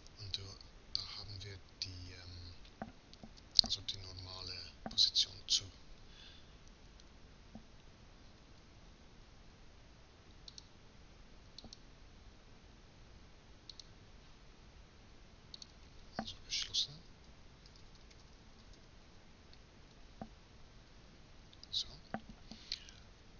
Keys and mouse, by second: 8.3 a, 8.6 a, 10.2-12.1 drag, 18.0 s.